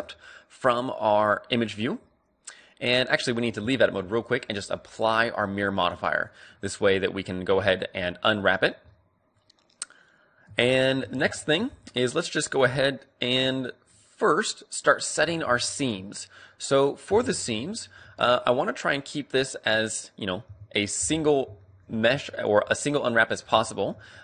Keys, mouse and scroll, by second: 0.8-2.0 middle drag, 2.8-6.8 drag, 3.6 Tab, 6.8-10.5 middle drag, 10.5 Tab, 10.5-10.9 scroll up 1, 11.0 a, 11.3-13.3 middle drag, 13.5-14.9 right drag, 13.9-17.2 middle drag, 17.0 n, 17.6-20.0 right drag, 18.9-20.5 middle drag, 20.5 KP_5, 21.2-24.2 middle drag, 22.1 a, 22.3 click.